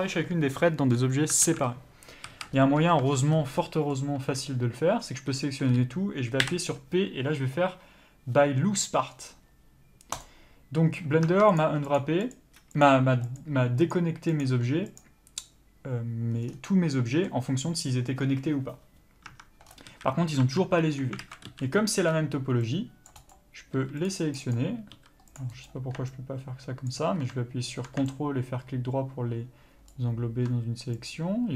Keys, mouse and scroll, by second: 1.4 alt+a, 2.2 a, 10.2 p, 11.2 Tab, 11.5 click, 16.4 scroll down 1, 16.6-20.3 middle drag, 19.2 Tab, 19.6 scroll up 1, 19.8 a, 20.3 Tab, 20.8-21.2 scroll down 1, 21.2 alt+a, 23.1 c, 26.8 ctrl+click, 29.8 ctrl+right click, 31.0 click.